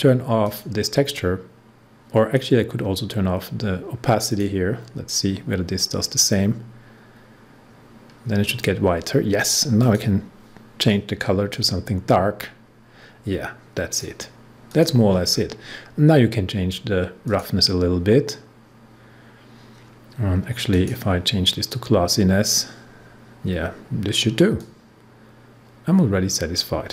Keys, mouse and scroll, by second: 0.4 click, 4.2-8.8 drag, 9.7-14.7 drag, 15.2 scroll down 1, 17.2 click, 20.6 click, 24.6-26.9 drag.